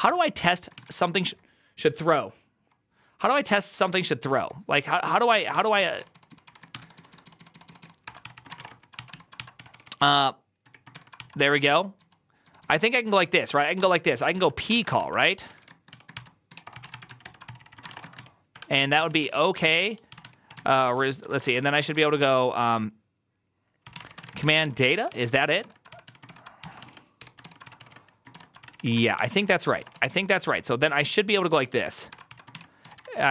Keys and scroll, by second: 0.0-22.3 typing, 23.5-33.3 typing, 26.5 ctrl+c.